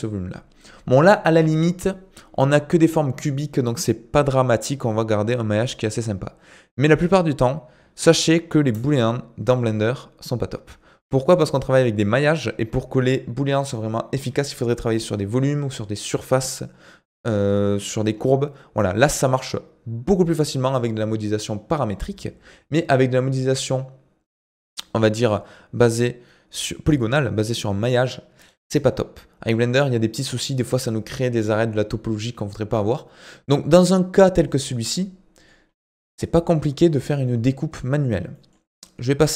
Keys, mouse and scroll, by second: 8.7 Delete, 34.6-34.9 scroll down 1, 34.9-37.0 middle drag, 37.0 scroll down 2, 37.2-39.3 middle drag.